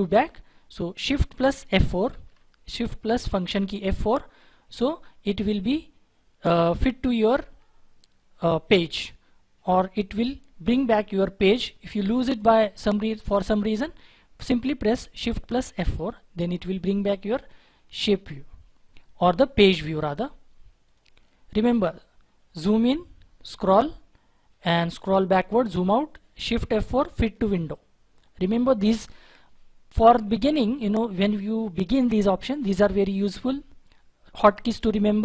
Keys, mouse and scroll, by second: 2.1 shift+F4, 12.4-13.8 scroll up 1, 14.9-15.6 scroll, 15.6 shift+F4, 21.2 double click, 22.2-24.5 scroll up 1, 25.2-26.6 scroll down 1, 27.2 shift+F4.